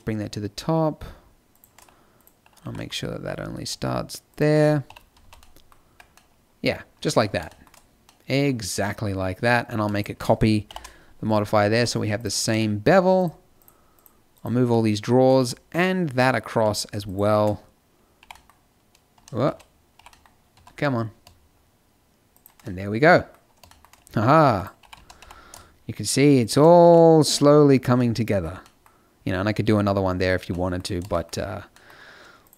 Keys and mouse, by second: 2.6 g, 4.0 click, 4.8 KP_5, 5.1 z, 5.8 Tab, 10.6 ctrl+l, 11.7 a, 12.6 click, 15.3 z, 18.1 g, 19.4 z, 19.9 g, 24.5 right click, 24.7 g, 26.4 click, 26.8 a, 32.4-32.5 middle drag.